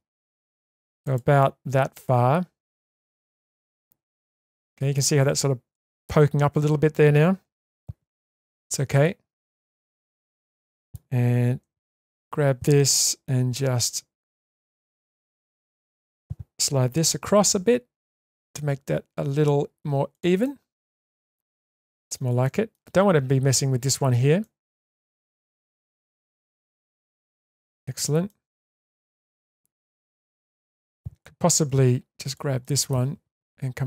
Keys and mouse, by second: 1.4-4.9 middle drag, 5.7 shift+middle click, 7.7 1, 8.5-9.5 middle drag, 10.0 middle drag, 10.3-10.9 middle drag, 11.6 2, 12.0 click, 14.4-16.1 middle drag, 17.5 g, 20.5-21.5 middle drag, 21.8-22.1 shift+middle drag, 22.4-22.7 shift+middle drag, 24.4 shift+middle drag, 25.2-25.7 middle drag, 25.8 shift+middle click, 26.2-27.6 middle drag, 27.8 shift+middle click, 28.3-30.9 middle drag, 31.7 1, 32.3 click, 32.6 middle click.